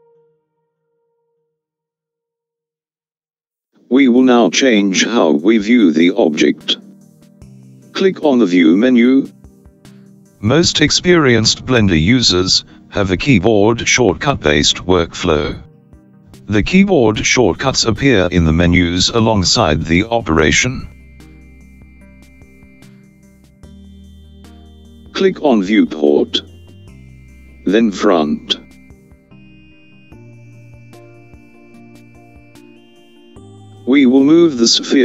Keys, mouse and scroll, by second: 6.1 click.